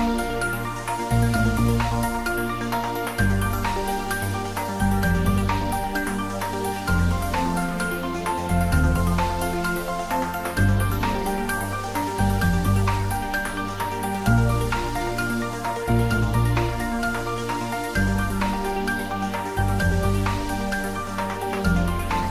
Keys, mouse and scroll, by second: 0.8-2.7 typing, 4.9 click, 5.8 ctrl+z, 7.7-9.6 typing, 11.0 click, 12.1-13.7 scroll down 1, 14.1 g, 14.7 y, 22.1 click.